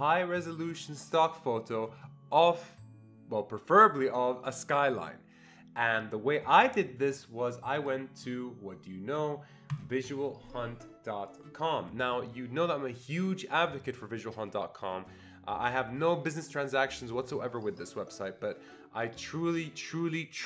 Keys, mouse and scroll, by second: 7.8 click, 10.0 click, 11.3 click.